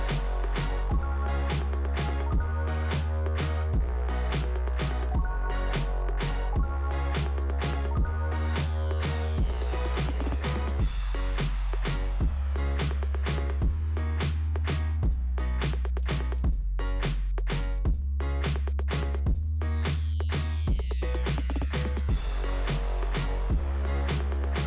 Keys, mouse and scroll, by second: 1.0 click, 3.5 click, 5.1 click, 5.6 click, 9.5 click, 11.5 Delete, 13.1-14.2 scroll up 1, 14.6 click, 16.1 click, 19.0 alt+f, 21.0-21.5 scroll up 2.